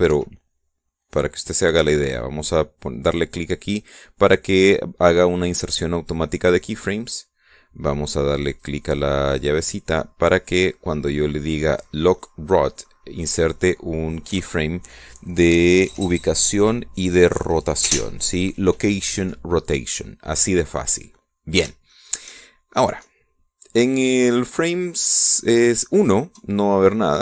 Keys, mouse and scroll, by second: 0.1 click, 0.9 Escape, 1.8 click, 7.3 click, 9.3 click, 10.1 click, 11.3 click, 13.9 click, 22.7 shift+click.